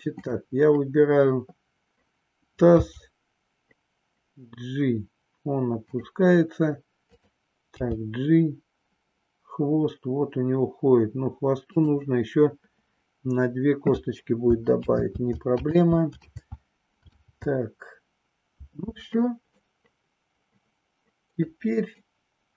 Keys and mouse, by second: 2.7 g, 7.0 click, 7.9 g, 15.4 ctrl+z, 17.3 ctrl+z, 19.6-21.5 middle drag.